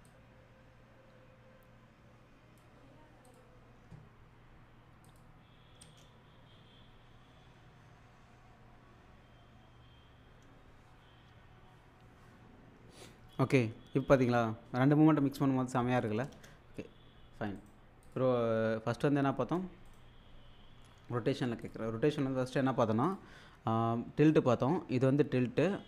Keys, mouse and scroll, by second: 0.1-2.9 drag, 5.1 click, 5.8 space, 16.3 space, 17.6 right click, 18.1 click, 19.9 right click, 21.6 click, 23.0 click, 24.3-25.8 drag.